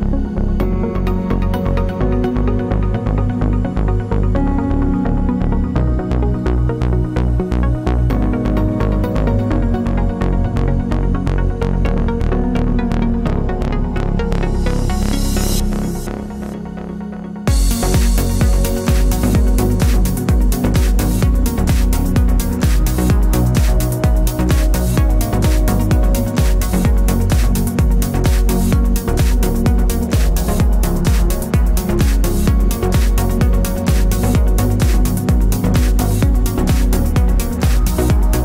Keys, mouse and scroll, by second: 0.5 Tab, 3.6 click, 4.0 shift+click, 4.6 g, 24.6 x, 25.2 scroll down 1, 25.5 scroll up 1, 26.5 x, 26.8 scroll down 1, 27.1 scroll up 1, 27.6 click, 28.1 alt+d, 31.7 ctrl+z, 36.2 click, 37.3 Tab, 37.8 alt+click.